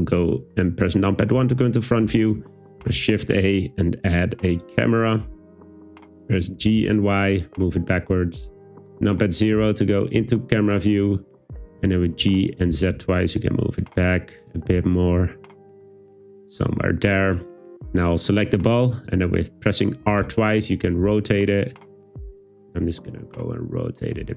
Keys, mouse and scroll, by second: 0.1 `, 2.8 shift+a, 6.2 click, 6.6 g, 6.8 y, 8.0 click, 12.1 g, 12.7 z, 12.9 z, 16.5 click, 18.0 click, 20.0 r, 20.3 r.